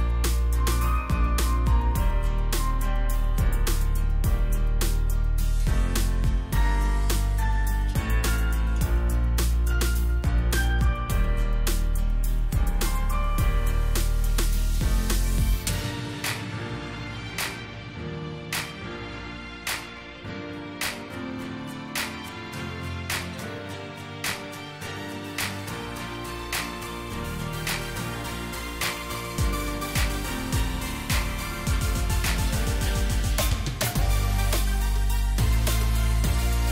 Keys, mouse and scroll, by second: 1.4 shift+click, 2.1 ctrl+g, 2.6 shift+click, 3.8 double click, 4.8 alt+scroll down 1, 5.7 space, 8.5 space, 12.3 alt+shift+click, 14.6-15.0 alt+scroll up 1, 17.4 right click, 18.7 Down, 18.9 Down, 27.2 alt+shift+click, 29.0 shift+click.